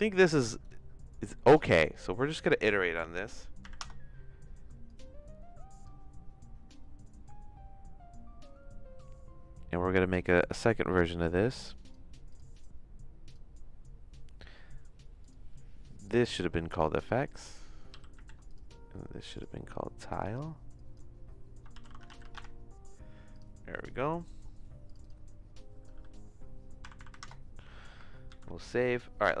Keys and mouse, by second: 1.4 middle click, 2.3-5.8 drag, 10.1 click, 11.8 click, 13.3 click, 16.0 click, 16.2-18.7 drag, 19.3 click, 20.1-22.9 drag, 23.3 click, 24.8 click, 25.0-27.7 drag, 26.9 KP_0, 27.1 KP_0, 28.2 ctrl+s.